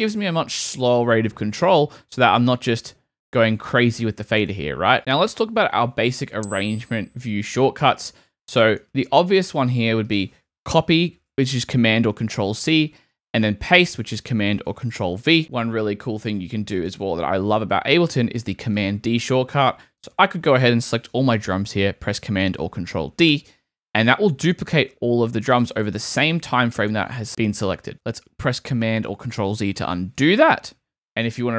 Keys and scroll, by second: 0.3 space, 4.0 super+z, 11.3 super+c, 14.0 super+v, 15.1 super+v, 15.3 super+z, 23.3 super+d, 30.2 super+z.